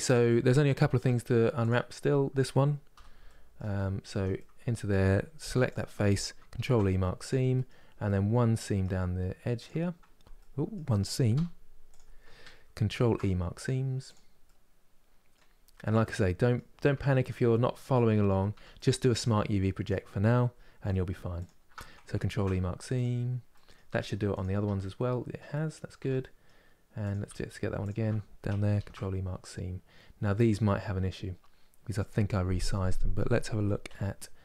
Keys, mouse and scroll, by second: 0.7 Tab, 1.3 click, 1.6 middle click, 2.6 n, 2.9 middle click, 3.4-3.8 scroll up 5, 3.8 Tab, 4.0-5.2 middle drag, 5.2 3, 5.4 click, 6.9 ctrl+e, 7.2-9.3 middle drag, 9.3 click, 10.1 middle click, 11.0 2, 11.6 click, 13.8 ctrl+e, 14.1-15.2 middle drag, 15.2 scroll down 2, 15.7-16.7 middle drag, 16.7 Tab, 16.9 click, 17.2 middle click, 17.8-18.2 scroll up 2, 18.2 Tab, 18.5-19.5 middle drag, 19.5 click, 21.1 alt+click, 22.7 ctrl+e, 23.2 middle click, 23.6 Tab, 24.1 click, 24.3 Tab, 24.7-25.2 scroll down 1, 25.2 middle click, 25.7 Tab, 25.9 middle click, 26.8 click, 26.9 Tab, 27.5 alt+click, 32.3-33.5 middle drag, 33.5 n.